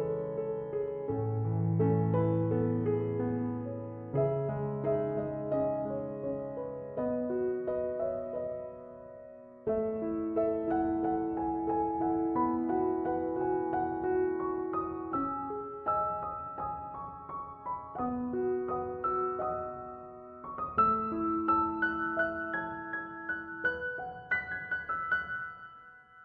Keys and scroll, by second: 14.1 0, 14.3 Return, 24.3 4, 24.6 Return.